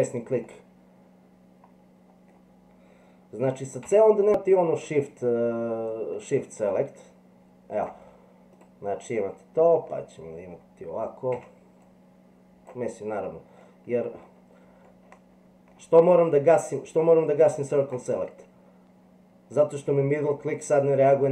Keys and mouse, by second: 0.4-2.2 middle drag, 3.8 c, 9.1 middle click, 11.4 c.